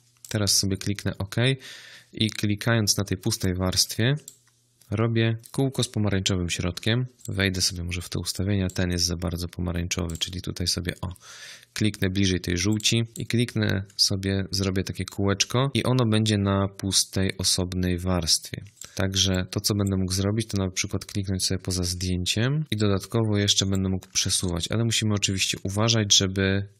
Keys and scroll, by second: 6.6 ctrl+z, 14.4 ctrl+z, 24.1 ctrl+z.